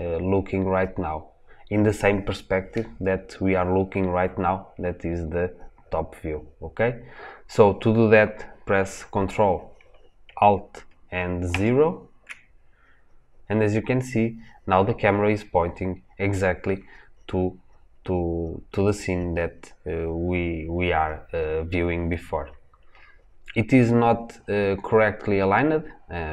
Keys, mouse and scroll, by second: 11.4 ctrl+alt+KP_0.